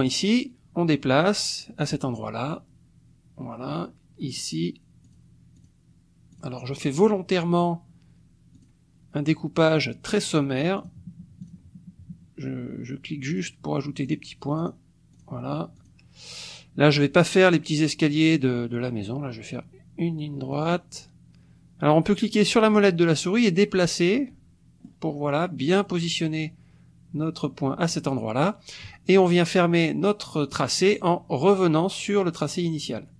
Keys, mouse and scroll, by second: 0.0 click, 1.8 click, 4.3 click, 5.0 click, 5.6 click, 6.3 click, 7.0 click, 8.5 click, 10.8 click, 11.4 click, 13.3 click, 14.0 click, 14.6 click, 15.1 click, 15.7 click, 20.5 click, 22.6-25.0 drag, 25.0-27.6 middle drag, 27.9 click.